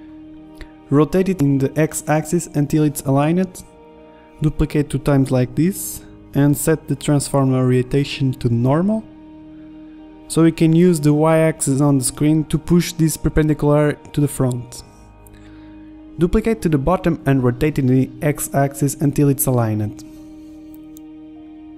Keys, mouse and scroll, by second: 0.6 KP_1, 0.9 KP_3, 1.7 r, 3.0 KP_1, 3.0 z, 3.6 shift+d, 4.6 shift+d, 5.4 KP_3, 6.9-11.3 drag, 12.7-14.6 drag, 14.6-18.2 typing, 19.8-20.2 drag, 21.0 z, 21.5 middle click.